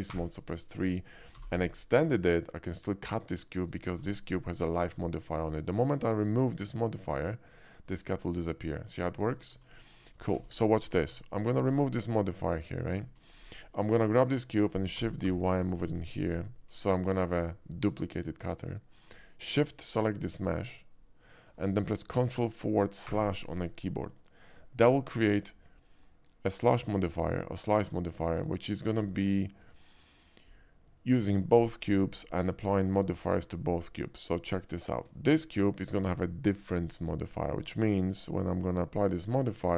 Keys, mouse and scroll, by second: 0.1 3, 0.3 click, 1.3 g, 1.5 y, 1.6 g, 3.6 click, 4.0 Tab, 4.3 click, 7.1 click, 9.5 ctrl+z, 10.0 ctrl+z, 10.2 ctrl+z, 10.3 middle click, 11.1 Tab, 11.4 click, 12.5 click, 13.0 middle click, 13.3 shift+middle click, 14.2 shift+click, 15.0 shift+d, 15.2 y, 15.9 click, 16.1 middle click, 16.8 middle click, 17.3-18.7 shift+middle drag, 19.9 shift+click, 23.0 ctrl+KP_Divide, 26.9 shift+middle drag, 27.2 shift+middle click, 34.6 click, 34.7-35.5 middle drag, 39.3 click.